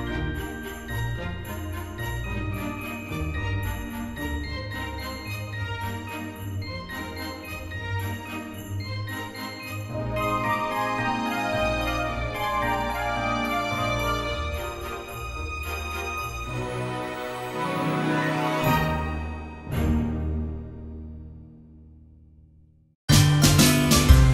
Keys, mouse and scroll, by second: 2.2 space, 2.6 space, 4.4 space, 9.0 space, 9.5 space, 11.0 space, 12.0 space, 14.0 space, 15.9 space, 17.4 ctrl+s, 17.9 space, 20.2 space, 21.2 space, 21.5 space, 24.2 space.